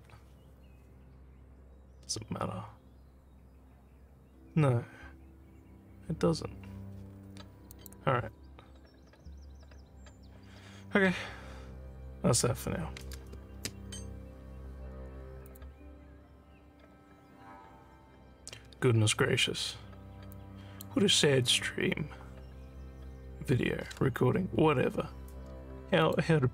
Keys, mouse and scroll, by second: 7.7 click, 13.5 ctrl+s, 15.5 click, 20.3 click, 26.0 click.